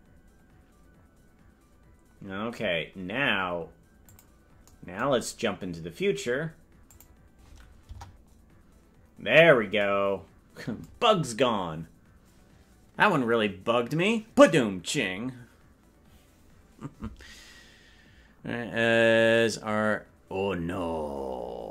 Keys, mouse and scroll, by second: 0.7-1.4 scroll down 1, 1.4-4.2 scroll down 2, 4.2 click, 7.0 click, 7.8 KP_0.